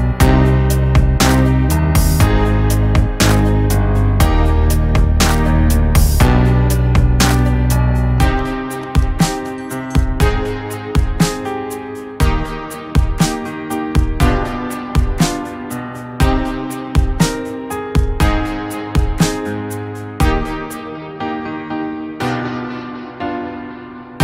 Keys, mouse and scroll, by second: 13.6 click, 17.6-24.2 drag.